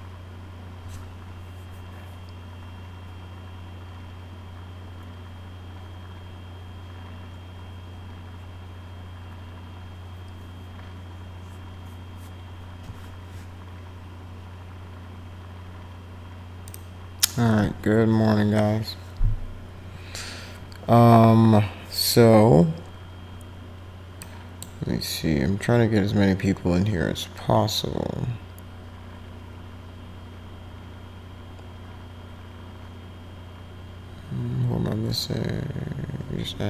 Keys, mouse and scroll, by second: 16.7 click, 24.2 click.